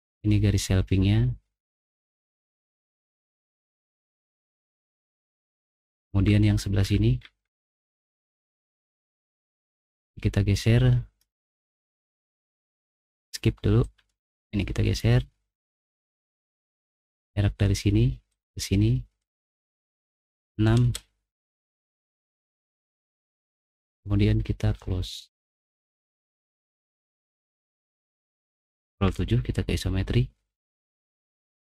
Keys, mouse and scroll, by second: 5.0 middle click, 5.4 middle click, 5.8 middle click, 6.2 middle click, 6.7 middle click, 7.2 middle click, 8.3 middle click, 9.9 click, 10.3 click, 12.3 Escape, 13.1 Escape, 14.3 click, 16.0 click, 17.1 click, 19.2 click, 20.4 6, 20.8-27.7 Return, 25.7 click, 29.0 ctrl+7, 31.2 middle click, 31.2 scroll up 2.